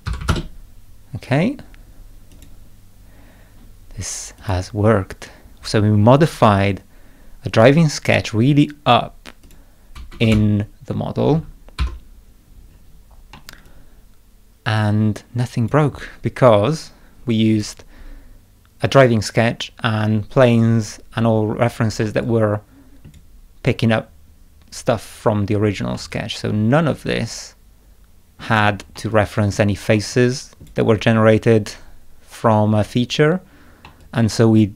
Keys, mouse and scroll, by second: 2.3 click, 4.4 click, 9.4 click, 10.2 space, 11.8 0, 12.7 scroll up 2, 13.3 middle click, 13.6-15.7 drag, 13.6-15.6 scroll down 2, 17.5 click, 22.0 scroll down 1, 22.1 middle click, 22.2 click, 23.1 scroll up 1, 25.9-28.4 middle drag, 26.1-28.5 drag, 28.9 middle click, 29.1 click, 29.9 middle click, 30.1 click, 33.8 middle click, 34.0 click.